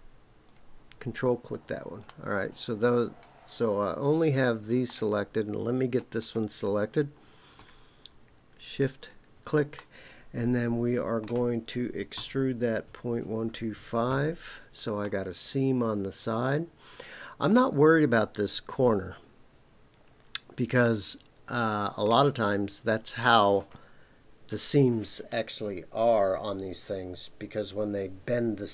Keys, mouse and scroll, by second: 0.4 ctrl+click, 1.3 scroll down 2, 2.0-4.9 middle drag, 6.2 scroll up 1, 9.0 shift+click, 9.7-11.2 middle drag, 12.1-13.7 typing, 14.1 KP_Enter, 15.0-17.6 middle drag, 20.8-22.2 middle drag.